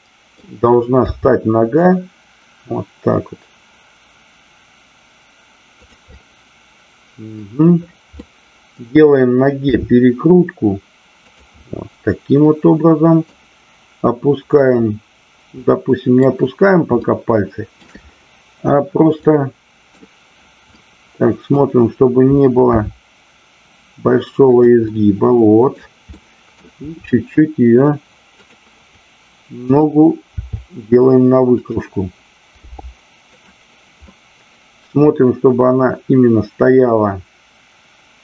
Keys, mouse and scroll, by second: 5.8 click, 6.1 scroll up 1, 6.3-7.4 middle drag, 8.1 scroll up 1, 8.2 middle click, 9.7 r, 11.2 click, 11.6-13.3 middle drag, 14.5 click, 15.6 middle click, 17.0 shift+middle click, 19.2-19.9 middle drag, 20.7 middle click, 22.7 r, 24.4 click, 24.8 middle click, 26.0 middle click, 29.6 click, 30.3 r, 31.6 click, 32.5 g, 34.1-38.2 middle drag.